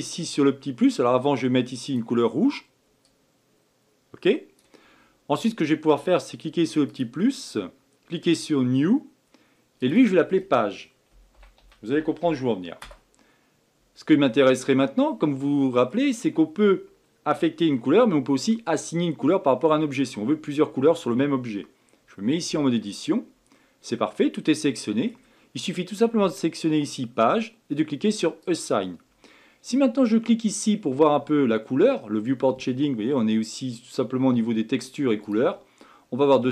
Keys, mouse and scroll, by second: 1.9 click, 6.9-9.9 drag, 9.9-13.0 drag, 14.5-17.6 middle drag, 22.5 Tab, 23.5-26.7 middle drag, 28.4-31.5 drag, 35.3 click, 35.8-36.5 middle drag.